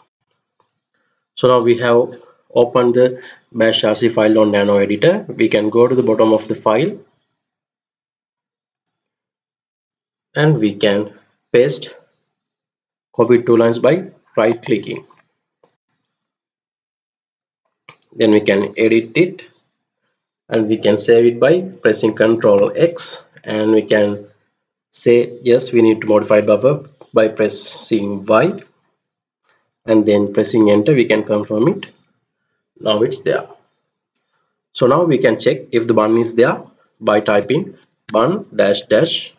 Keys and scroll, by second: 4.0-8.3 Down, 9.4 Return, 15.5-17.1 Left, 18.4 Delete, 19.1 Delete, 22.2 ctrl+x, 28.3 y, 31.1 Return, 36.6-38.5 typing.